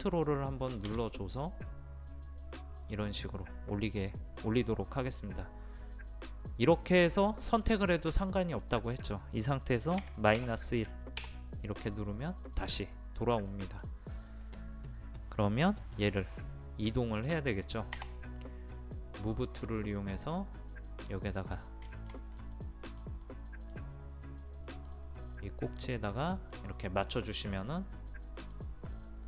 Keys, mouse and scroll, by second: 7.3 click, 8.2-9.5 middle drag, 10.4 KP_1, 12.5-14.3 middle drag, 14.3-16.3 scroll up 1, 18.0 m, 19.2 click, 19.6 scroll down 1, 19.7-20.0 scroll up 1, 20.0 middle click, 21.5 click, 22.0 shift+middle click, 22.3 scroll up 1, 22.6-24.5 middle drag, 24.8 click, 26.6 middle click, 28.4-29.2 drag.